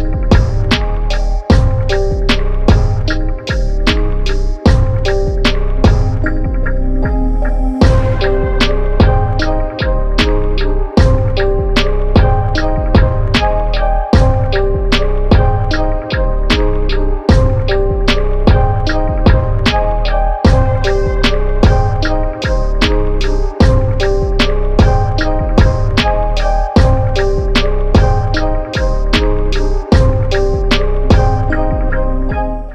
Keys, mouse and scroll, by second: 7.9-8.4 typing, 8.9 click, 10.4-12.2 typing, 12.8-17.0 drag, 19.1 click, 19.7 alt+click, 22.7-23.1 typing.